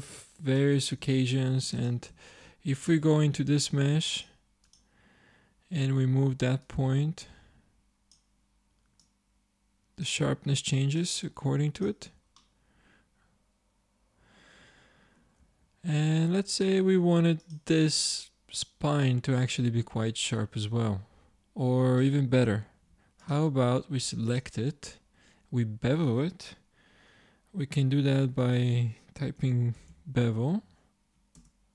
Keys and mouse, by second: 1.0 Tab, 1.5 Tab, 2.2-3.6 drag, 2.3 Tab, 3.6 ctrl+Tab, 7.0-8.4 drag, 9.5-10.8 drag, 11.4 click, 12.1 Tab, 12.5 click, 15.5 Tab, 16.9 ctrl+Tab, 22.7 ctrl+Tab, 28.5 space.